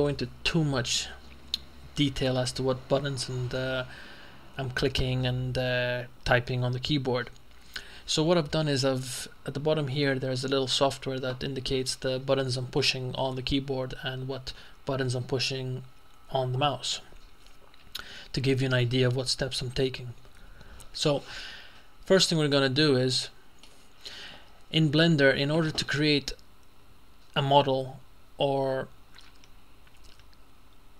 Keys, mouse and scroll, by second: 22.6-24.2 shift+middle drag.